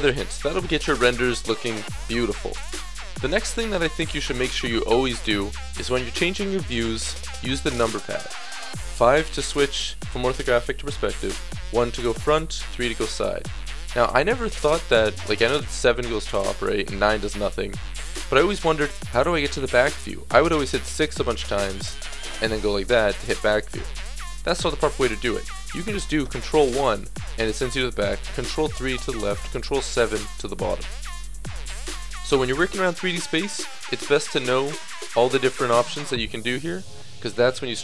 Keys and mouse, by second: 0.0 Escape, 4.5-7.8 middle drag, 7.8 KP_1, 8.6 KP_5, 9.8 KP_5, 10.8 KP_5, 11.5 KP_1, 12.1 KP_3, 13.4 KP_1, 15.1 KP_7, 16.5 KP_9, 18.0 KP_1, 20.3-21.9 KP_6, 23.7 KP_6, 33.7-37.1 typing.